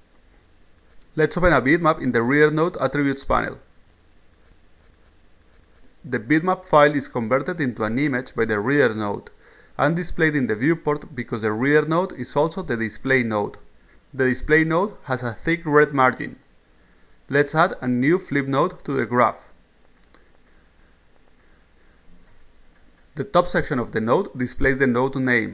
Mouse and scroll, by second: 3.1 click, 4.4 click, 4.6 click, 18.9 click, 20.1-22.0 drag.